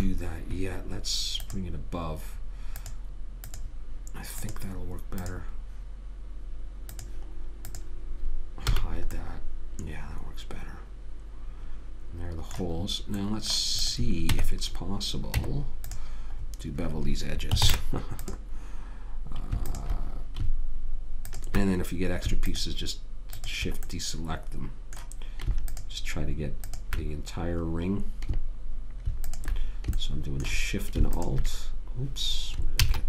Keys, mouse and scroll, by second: 0.2 ctrl+z, 1.7-6.3 drag, 9.0 h, 9.6 middle click, 14.1 click, 14.6 Tab, 15.7 Tab, 16.7-18.9 middle drag, 18.0 ctrl+Tab, 20.0-25.4 drag, 29.6 click, 30.3-32.0 right drag, 31.5 click.